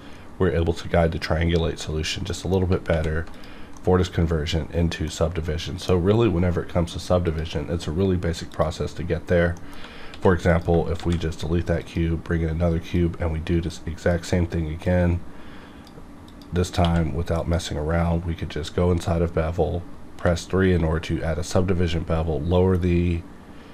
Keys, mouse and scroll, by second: 1.9 middle click, 2.0 scroll down 1, 2.3 middle click, 2.9 alt+v, 3.3 click, 3.7 middle click, 3.9-7.2 middle drag, 7.2 click, 9.5 middle click, 10.1 x, 10.5 click, 11.0 shift+a, 11.8-16.3 drag, 16.8 q, 17.4 click, 20.2 3.